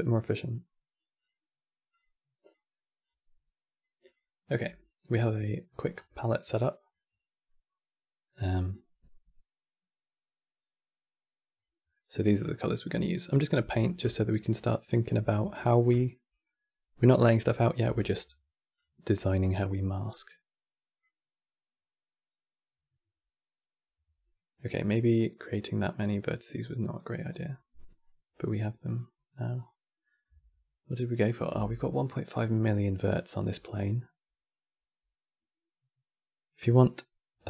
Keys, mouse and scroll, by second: 0.9 click, 1.6 click, 3.7 click, 4.2-4.9 scroll down 4, 5.1 middle click, 5.6 scroll down 4, 5.8-8.4 middle drag, 8.4 click, 11.6-13.4 middle drag, 13.4-13.8 scroll down 3, 13.8-17.6 shift+middle drag, 17.6 e, 21.4-24.1 drag, 27.7-28.6 scroll up 5, 28.6 click, 29.2 click.